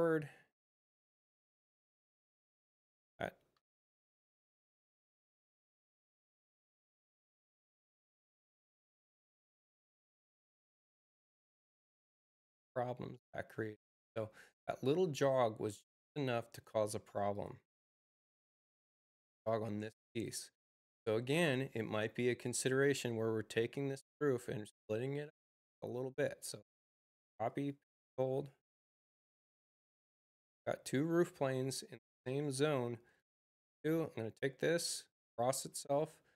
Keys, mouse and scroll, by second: 2.5 Return, 2.5 click, 6.1 click, 10.9 click, 17.2 click, 26.5 c, 27.4 shift+c, 27.5 shift+click, 33.1-35.6 drag.